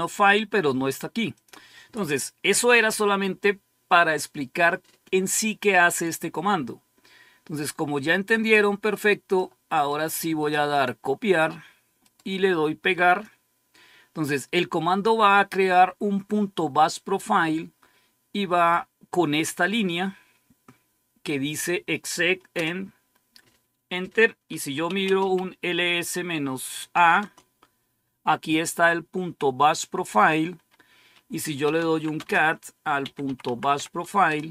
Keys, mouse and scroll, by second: 1.3 click, 5.8 click, 7.5-9.3 drag, 10.0 right click, 10.6 click, 12.0 right click, 13.0 click, 22.5 Return, 24.4-25.6 typing, 26.8-27.6 typing, 29.1-29.8 typing, 30.1 click, 31.3-33.9 typing, 34.2 Return.